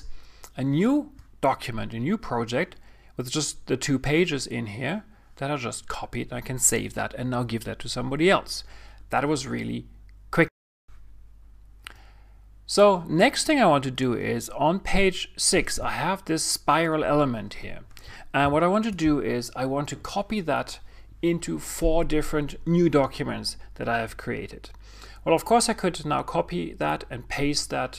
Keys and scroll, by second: 18.4 super+0.